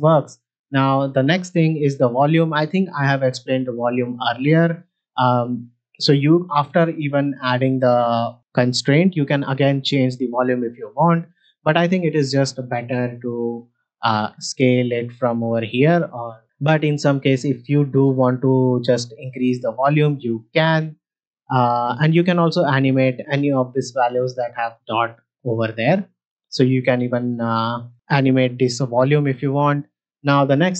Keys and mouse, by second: 5.5 click, 9.6-11.1 drag, 14.0-15.7 drag, 17.1-18.9 drag, 20.0-20.7 drag, 26.4-27.7 drag.